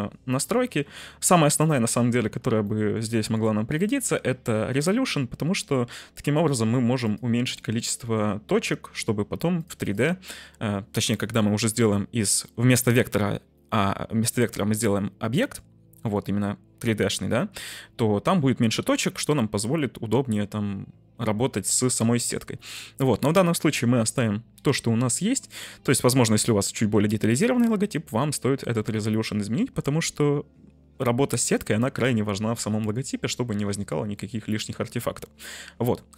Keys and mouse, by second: 2.7 shift+middle drag, 3.7 middle click, 7.1 click, 7.4 click, 9.5 click, 34.1-35.9 middle drag.